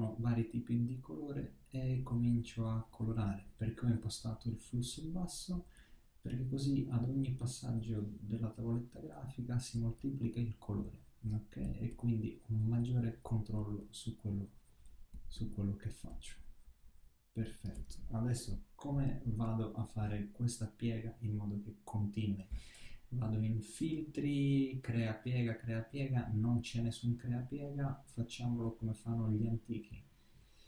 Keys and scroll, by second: 18.3 super++.